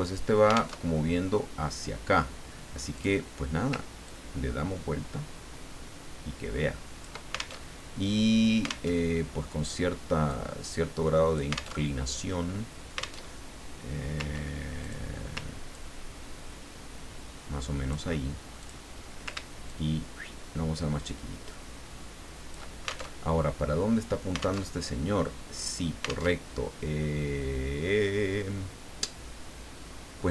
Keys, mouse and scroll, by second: 0.8 alt+Tab, 2.9 click, 4.1-7.2 ctrl+drag, 7.6 ctrl+alt+Tab, 8.9 alt+Tab, 10.3-11.8 drag, 11.8 alt+Tab, 13.2 alt+Tab, 14.8 click, 15.7-18.2 ctrl+drag, 18.6 click, 19.7-22.7 ctrl+shift+drag, 23.1 ctrl+alt+shift+Tab, 24.6 alt+Tab, 26.3 alt+Tab.